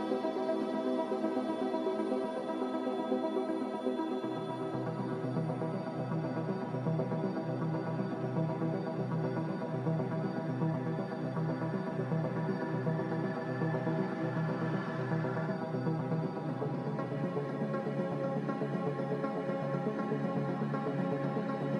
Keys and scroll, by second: 1.5 typing, 5.9-6.8 typing, 8.9 Tab, 9.9 Return, 11.4-12.5 typing, 15.0 n, 18.7 a, 20.3 n.